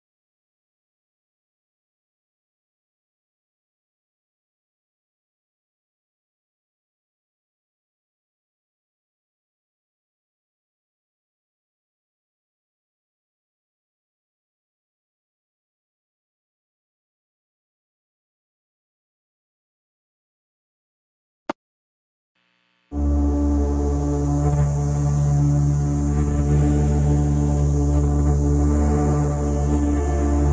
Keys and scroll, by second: 0.3 Down, 0.5 Right, 0.7 Down, 1.0 F3, 1.2 Escape, 1.4 F3, 1.5 Escape, 1.9 F2, 2.1 Escape, 2.3 F3, 2.5 Escape, 12.9 shift+F2, 13.0 F3, 15.5 F3, 15.8 Escape, 16.5 ctrl+z, 17.9 F2, 20.8 F3, 21.5 ctrl+s, 29.4 shift+F2.